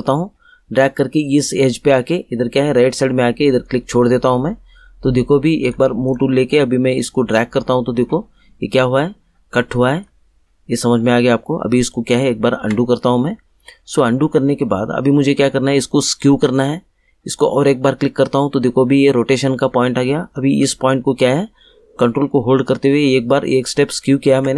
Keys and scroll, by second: 11.9 ctrl+z.